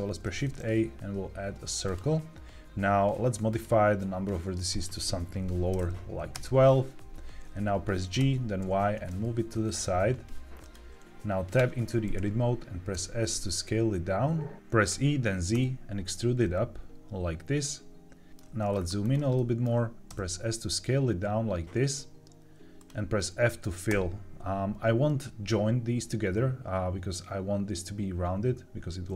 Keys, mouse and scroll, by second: 3.4 click, 4.6-6.3 drag, 8.1 g, 8.5 y, 10.5 click, 11.5 Tab, 12.8 s, 14.8 e, 15.4 z, 18.3 click, 18.3 shift+middle click, 18.6-19.3 scroll up 5, 19.3 shift+middle click, 20.0 s, 22.7 click, 23.8 f.